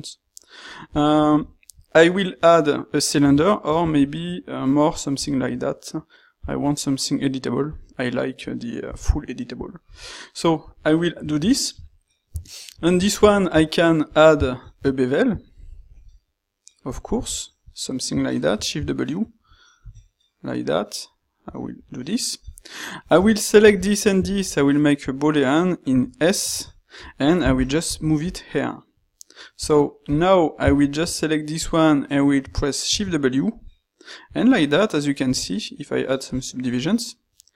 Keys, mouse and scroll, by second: 8.9 g, 10.0 s, 13.1 ctrl+shift+q, 24.2 ctrl+shift+q, 30.8 ctrl+shift+q.